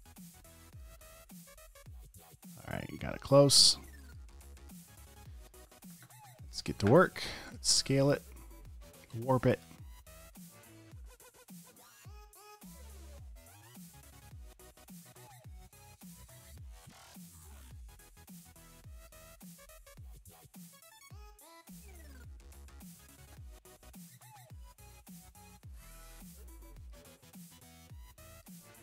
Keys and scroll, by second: 0.3 super+space, 0.9 space, 1.5 super+space, 4.3 space, 4.8 alt+super+space, 5.8-6.9 typing, 8.3 space, 9.1 space, 9.6 space, 10.9 space, 19.2 space, 19.7 space, 23.4 space, 25.9 space.